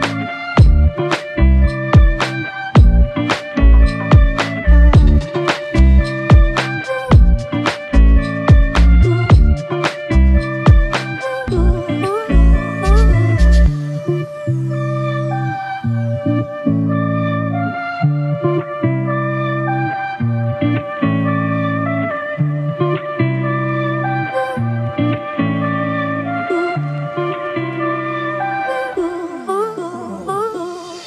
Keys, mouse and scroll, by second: 2.3 typing, 13.1 f, 13.5 ctrl+z, 17.1 f, 26.7 f, 27.7 double click.